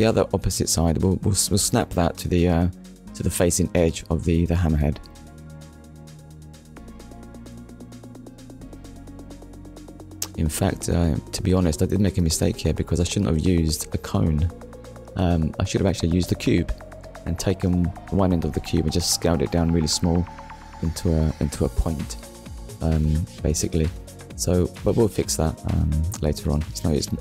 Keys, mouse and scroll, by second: 0.5 middle click, 2.8-3.1 scroll down 2, 3.1 shift+middle click, 3.6 middle click, 4.8 shift+middle click, 5.6 scroll up 1, 6.6 middle click, 12.2 Tab, 14.0 click, 14.5 click, 15.9 middle click, 16.6 click, 23.2 Delete, 25.1 click, 26.5 Tab, 26.9 middle click.